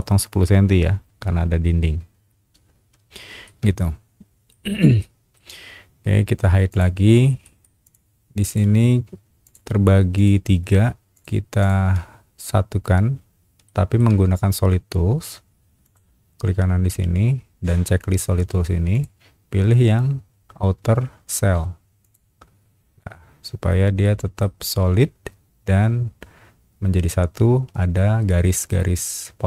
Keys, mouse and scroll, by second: 2.5 scroll down 1, 2.9 space, 3.4-4.5 shift+middle drag, 5.0 shift+middle click, 6.7 shift+click, 7.4 shift+middle click, 7.8 shift+click, 8.4 shift+click, 9.4 click, 10.1 click, 11.1 shift+click, 11.6 shift+click, 13.6 shift+middle click, 15.8 right click, 18.9 click, 22.0 click, 24.0 middle click, 28.3 middle click.